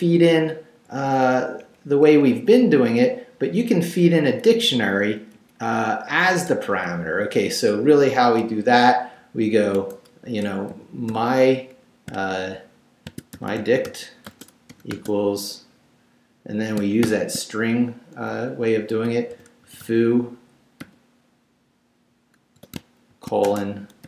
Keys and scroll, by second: 1.6 Up, 3.0 Left, 4.2 Down, 4.9 Up, 5.8 Down, 6.5 BackSpace, 9.7-12.1 typing, 13.1-14.9 typing, 17.0 shift+[, 19.3 f, 19.6 o, 20.8 ', 22.6-24.0 typing.